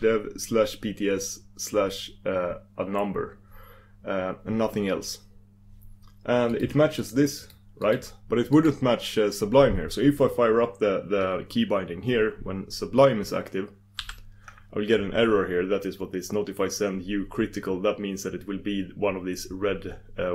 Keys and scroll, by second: 6.5 super+s, 14.5 super+d.